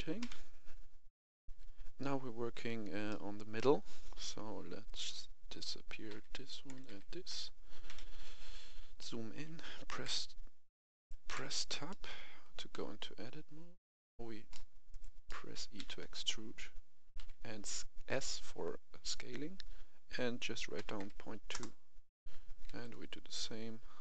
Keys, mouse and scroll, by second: 0.2 KP_1, 1.4 F10, 3.0-4.7 middle drag, 5.4 right click, 6.0 h, 6.6 right click, 7.2 middle click, 7.8 KP_1, 8.3-8.7 scroll up 1, 8.9 shift+middle click, 9.9 Tab, 10.9 right click, 11.2 Tab, 11.8 middle click, 12.6 c, 12.9 click, 14.8 right click, 15.2 middle click, 15.7 e, 17.1 s, 20.9 2, 21.4 Return, 22.2 a, 22.6 c, 22.7-24.0 drag.